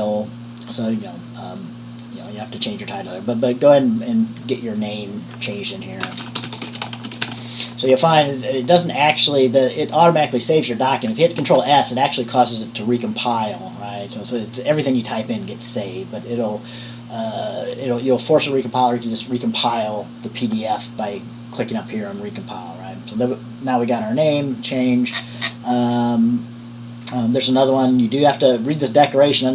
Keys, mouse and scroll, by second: 3.6-5.0 drag, 6.2-8.0 typing, 11.6 ctrl+s, 25.4 scroll up 1.